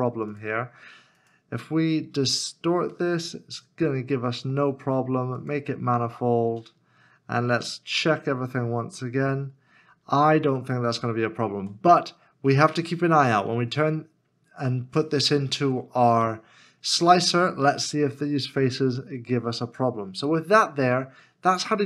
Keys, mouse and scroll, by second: 2.9 shift+middle click, 11.5 Tab, 16.8-17.9 scroll down 1, 18.6 middle click, 21.2 scroll down 1.